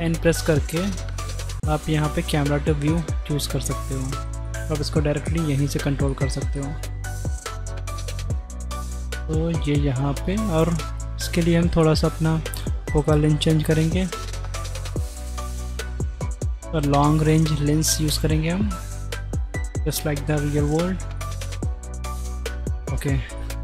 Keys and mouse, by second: 0.0 n, 1.1 click, 2.2 click, 2.8 n, 4.0-4.4 middle drag, 4.6 shift+middle click, 5.3 middle click, 5.5 click, 6.2 shift+click, 6.6 click, 7.0 middle click, 8.1 middle click, 8.8 shift+middle click, 9.4 middle click, 10.9 click, 12.6-14.4 drag, 15.9-17.0 drag, 16.5 KP_0, 19.0-19.7 middle drag, 19.9 shift+click, 21.3 shift+click, 23.5 middle click.